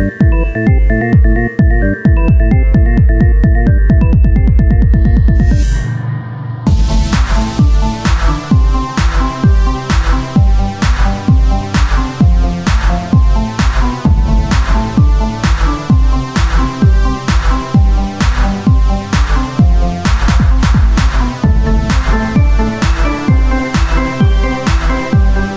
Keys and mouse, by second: 0.0 Tab, 0.4 a, 1.0 z, 1.0 a, 2.2 s, 4.6 r, 6.3-9.3 drag, 6.7 z, 9.1 Tab, 10.6-14.4 drag, 11.0 Tab, 15.4 Tab, 16.6-17.6 drag, 17.6 o, 18.0 s, 20.7 ctrl+Tab, 23.1-25.3 drag, 24.0 Tab.